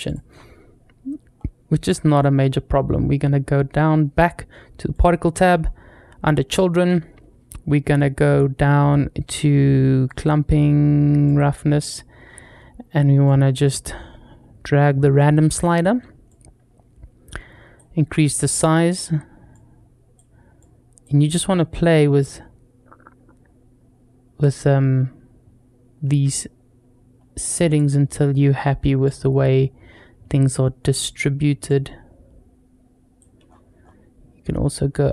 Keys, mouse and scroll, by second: 0.6-1.7 scroll up 3, 1.7 click, 2.7-3.4 scroll down 1, 4.7 click, 5.1-6.2 scroll down 2, 6.4-6.7 scroll down 1, 9.9 click, 11.1 click, 11.5-13.1 scroll down 1, 13.1-15.5 drag, 13.1 scroll down 1, 16.1-17.6 drag, 19.4 click, 20.4 click, 21.2-27.6 drag, 28.9-30.8 drag, 31.5-33.0 drag, 33.3-35.1 scroll up 4.